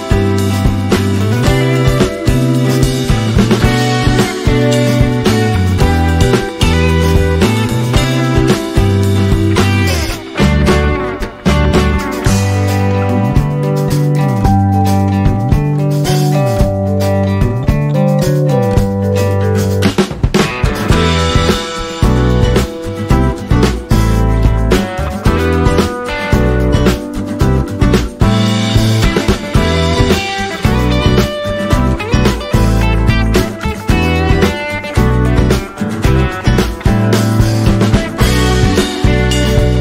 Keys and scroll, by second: 3.3 F12, 6.5 n, 27.4-28.4 typing, 29.6 /, 30.3 KP_2, 30.9 Return, 33.8 KP_5, 33.9 KP_4, 34.1 KP_0, 34.9 KP_Divide, 35.4-35.9 typing, 35.9 Return.